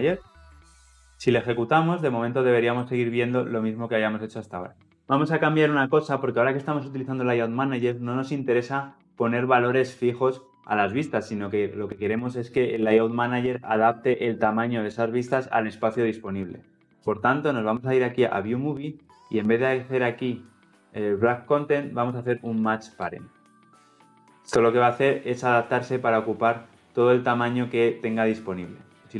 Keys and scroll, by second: 0.2 ctrl+alt+l, 0.3 ctrl+alt+o, 5.0 ctrl+alt+Left, 23.0 Return, 29.0 ctrl+F10.